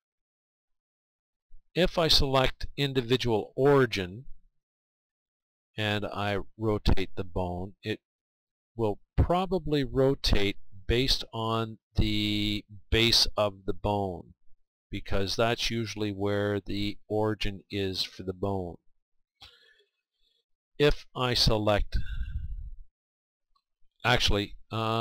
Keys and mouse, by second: 0.9-3.2 drag, 8.6 r, 18.6-20.0 right drag, 20.2 right click, 20.3-25.0 drag.